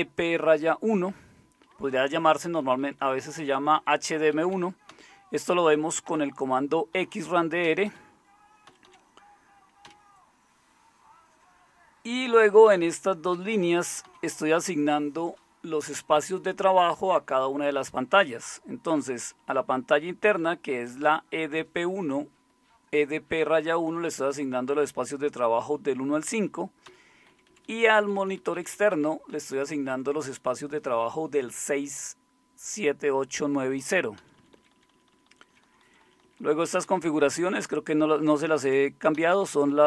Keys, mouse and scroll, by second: 1.7 Left, 1.9 Left, 2.1 Left, 2.3 Left, 2.5 Left, 2.6 Left, 2.8-3.6 Left, 4.3 Left, 4.9 Down, 6.1 Up, 7.0 Up, 7.6 Down, 7.9 Down, 8.7 Down, 8.9 Down, 9.9 Down, 12.3 Up, 12.7 Up, 13.3 Down, 14.1 Down, 19.4 Up, 19.6 Up, 20.4 Left, 21.1-21.8 Left, 22.2-23.0 Right, 23.3 Right, 23.5 Right, 24.1 Right, 24.2-26.0 Right, 26.3 Right, 26.9 Down, 27.3 Left, 27.5 Left, 27.7 Left, 27.8 Left, 28.0 Left, 28.2 Left, 28.9 Left, 29.3 Right, 29.5 Right, 29.7 Right, 29.9 Right, 34.2 Down, 34.4 Down, 34.6 Down, 34.8 Down, 34.9 Down, 35.3 Down, 35.9 Down, 36.1 Down, 36.2 Down, 36.9 Up, 37.0 Up, 37.2-38.1 Up, 38.3 Up, 39.1 Down, 39.3 Down, 39.5 Down, 39.7 Down.